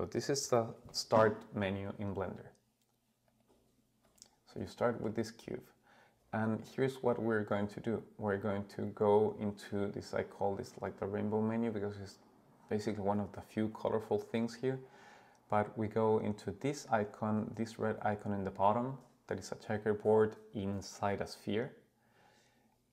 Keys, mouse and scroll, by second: 3.3 click, 4.0 click, 4.6-5.1 middle drag, 5.3-6.6 scroll up 2, 14.8 click.